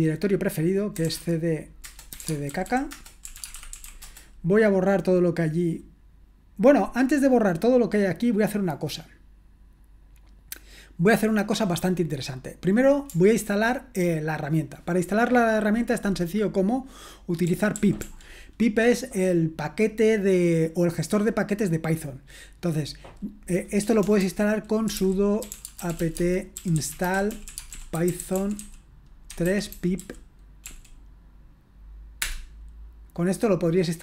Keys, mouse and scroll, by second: 0.7-4.5 typing, 17.2-18.5 typing, 23.8-31.0 typing, 32.2 Return.